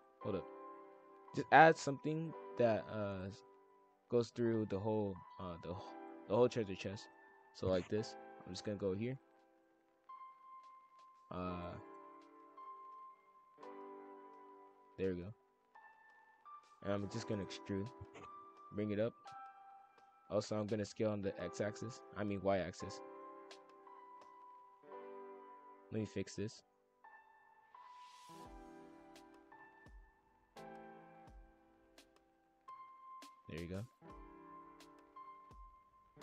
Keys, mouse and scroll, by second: 2.2 click, 2.7 click, 3.2 shift+d, 3.7 click, 5.9 shift+f, 8.5-9.3 drag, 10.2 click, 10.8 ctrl+z, 11.2 click, 11.7 shift+f, 12.8 drag, 16.7 ctrl+l, 17.1 e, 18.3 click, 20.1 ctrl+l, 21.0 s, 22.0 s, 26.9 click, 27.2 shift+f, 29.6 click, 30.8 shift+f, 32.7 click, 33.2 shift+f, 34.8 click.